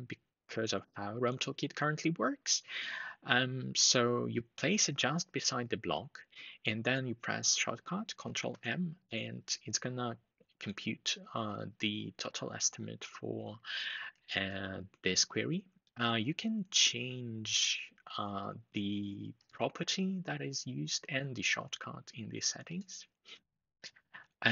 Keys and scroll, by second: 8.2 ctrl+m.